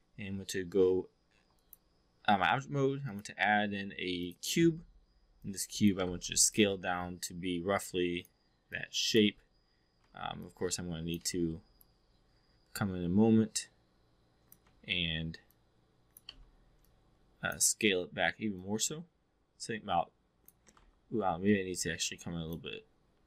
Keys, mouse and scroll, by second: 1.3 4, 1.5 drag, 3.1-4.3 drag, 5.5 click, 6.0 e, 6.1 r, 6.5-8.2 drag, 8.6-9.2 drag, 9.2 w, 9.9 e, 10.4-11.1 drag, 11.2 w, 11.7-14.6 drag, 14.6 e, 15.5 click, 16.3 w, 16.7-17.6 drag, 18.5-20.5 drag, 20.6 e, 20.7 r, 21.4-22.6 drag.